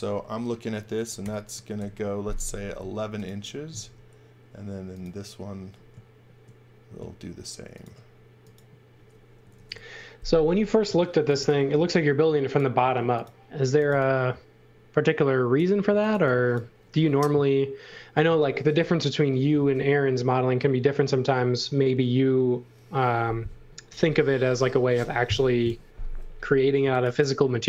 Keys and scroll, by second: 1.2 1, 1.7 Return, 2.7 space, 3.8 m, 9.4 1, 9.6 Return, 10.6-14.3 typing, 15.6-17.2 typing, 26.5-27.5 typing.